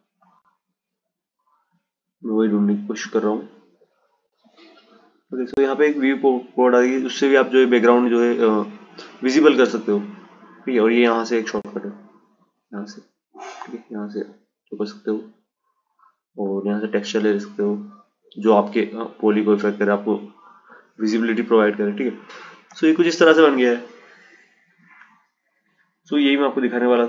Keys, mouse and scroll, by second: 4.3 click, 7.5-10.7 drag, 17.0 click, 19.6 click, 21.5 click, 24.0-27.0 drag.